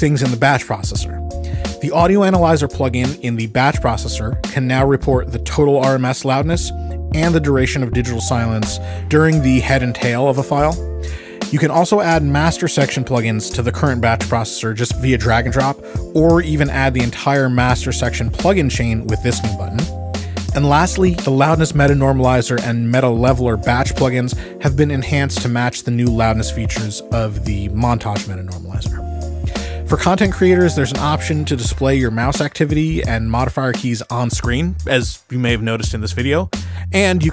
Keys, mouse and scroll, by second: 0.0-10.4 drag, 10.4 Escape, 25.9 Escape, 29.8 Escape, 35.2 Escape.